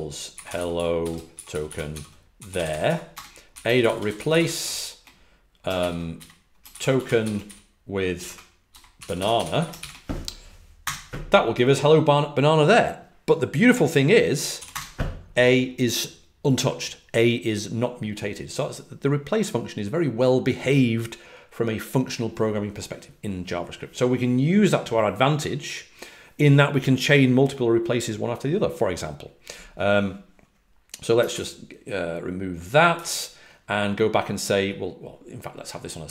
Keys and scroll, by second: 0.0-4.8 typing, 6.8-7.3 typing, 8.7-10.0 typing, 14.5 a, 14.6 Return, 32.9 ctrl+d.